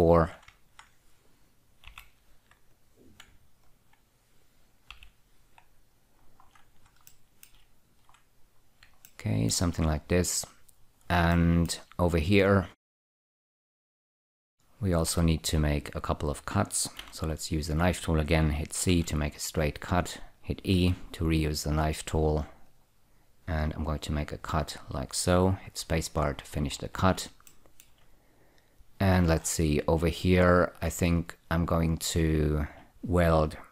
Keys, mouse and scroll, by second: 0.8 ctrl+click, 1.2 click, 2.2 ü, 3.0 click, 4.0 ctrl+click, 4.3 click, 5.2 ü, 6.5-7.2 scroll down 4, 7.4 shift+middle click, 8.6-9.1 scroll up 1, 9.3 shift+middle click, 11.6 shift+middle click, 13.1 scroll up 2, 13.8 shift+middle click, 14.3-15.4 scroll up 1, 15.4 1, 17.3 k, 18.2 click, 19.2 click, 19.2 c, 20.3 click, 21.1 e, 23.0 click, 24.7 click, 26.0 space, 26.5-27.6 scroll up 4, 27.8 shift+middle click, 29.3-31.1 scroll up 1, 32.1 click, 32.8 shift+double click.